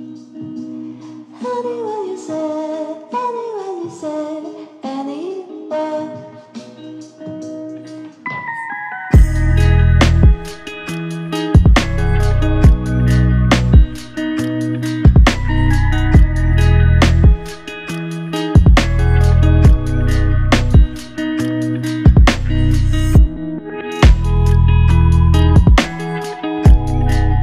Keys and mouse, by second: 1.5 double click, 4.5 double click, 11.4 shift+click, 18.0 double click, 19.2 shift+click, 22.6 alt+click.